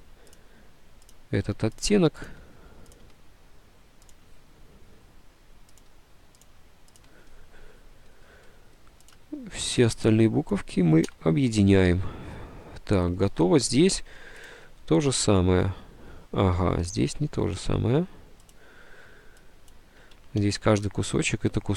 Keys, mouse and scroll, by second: 1.5 Delete, 1.9 ctrl+z, 2.1 Delete, 2.3 Delete, 3.1 Delete, 4.3 Delete, 5.9 Delete, 6.6 Delete, 7.1 Delete, 11.2 d, 15.7 Delete, 16.9 ctrl+z, 20.5 ctrl+z.